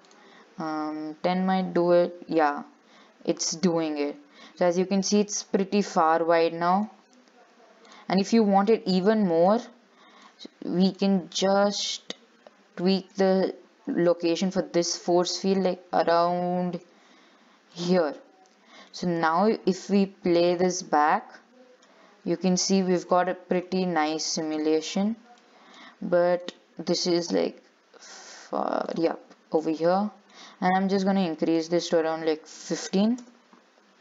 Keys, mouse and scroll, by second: 2.6-5.6 middle drag, 6.1-8.1 middle drag, 8.1-9.9 drag, 11.1 click, 12.1 click, 12.8 scroll down 4, 13.1 shift+middle click, 13.4-14.3 scroll up 11, 14.3 shift+middle click, 15.1 g, 18.2 scroll down 3, 18.4 middle click, 19.3 scroll down 1, 20.1-21.4 drag, 21.4-22.4 middle drag, 22.4-22.7 scroll down 3, 22.7-24.7 shift+middle drag, 24.7 click, 25.1-25.5 scroll down 6, 25.6 shift+middle click, 26.0-26.5 scroll up 6, 26.5 click, 27.2 g, 29.7 scroll down 1, 29.8-31.7 middle drag, 31.7-34.0 drag.